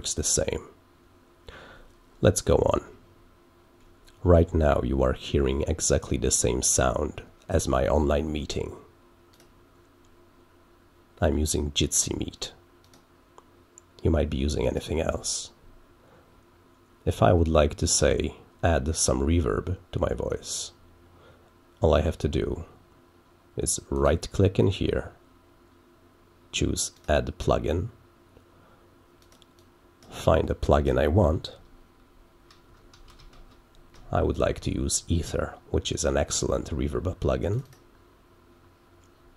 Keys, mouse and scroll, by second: 9.2 click, 12.8 click, 14.6 click, 23.9 right click, 26.9 click, 29.1 click, 29.5 click, 37.4 click, 37.6 click.